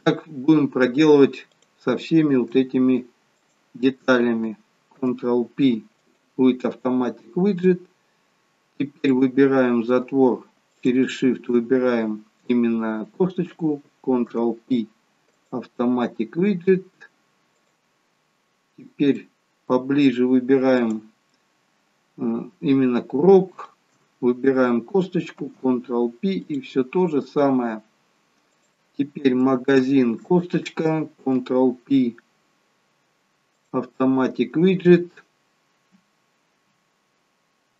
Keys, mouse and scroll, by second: 0.7 scroll down 1, 1.5 click, 3.8 shift+click, 5.1 ctrl+p, 9.1 click, 10.7 shift+click, 14.3 ctrl+p, 17.5 click, 18.7-19.1 scroll up 3, 19.2 middle click, 20.8 click, 23.9 shift+click, 25.3 ctrl+p, 27.0 scroll down 2, 28.4 scroll down 2, 28.6 click, 29.7 shift+click, 31.3 ctrl+p.